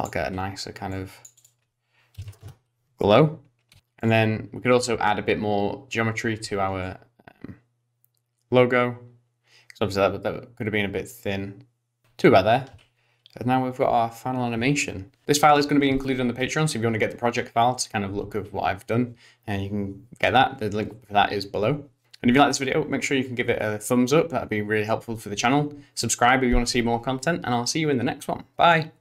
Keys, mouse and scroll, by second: 0.9 click, 1.4 click, 3.7 i, 4.0 click, 4.0 space, 6.9 shift+click, 12.7 space.